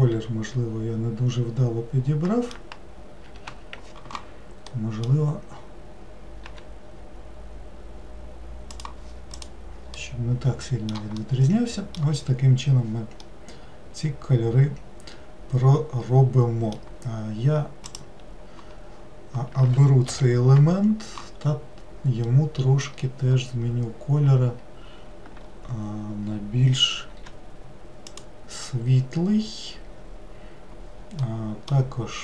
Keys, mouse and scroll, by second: 3.5 ctrl+z, 4.7-6.5 middle drag, 6.5 g, 9.4-10.0 drag, 10.0-16.2 middle drag, 17.9-20.1 drag, 20.1 l, 22.3-25.5 middle drag, 27.1 g, 31.2-32.2 middle drag.